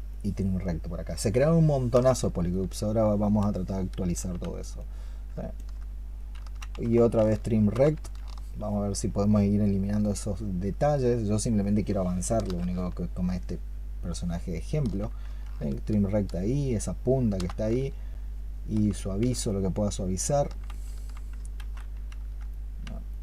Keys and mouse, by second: 0.0 ctrl+shift+click, 2.4 shift+click, 5.4 ctrl+click, 6.8 ctrl+click, 8.4 ctrl+shift+click, 10.8 ctrl+shift+click, 12.8 shift+click, 14.0 shift+click, 15.6 ctrl+shift+click, 17.6 shift+click, 19.3 shift+click, 21.4 ctrl+z, 22.9 shift+click.